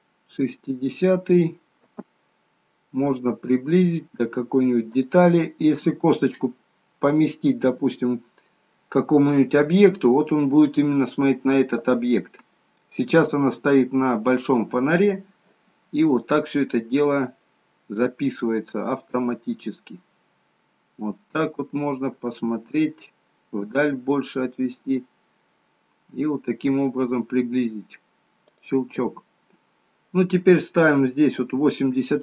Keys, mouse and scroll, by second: 2.0 g, 16.3 click, 19.3 g, 31.4 click.